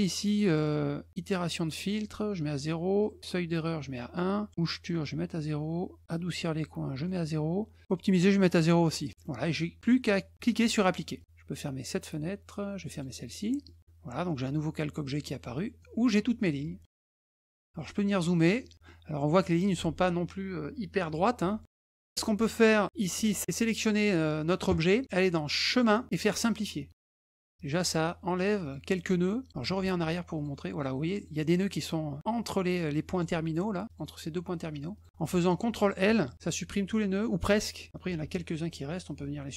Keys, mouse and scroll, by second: 1.1 click, 3.0 click, 4.6 click, 6.4 click, 7.9 click, 9.1 middle click, 11.8 click, 12.9 click, 13.6 middle click, 14.9 middle click, 15.8-16.9 drag, 17.5 middle click, 17.7 middle click, 18.2 middle click, 18.6 middle click, 19.3 middle click, 21.5 middle click, 22.3 click, 23.0 click, 25.7 click, 27.3 click, 28.6 click, 29.8 ctrl+z, 30.3 click, 31.1 click, 33.9 click, 34.9 click, 38.6 ctrl+shift+click.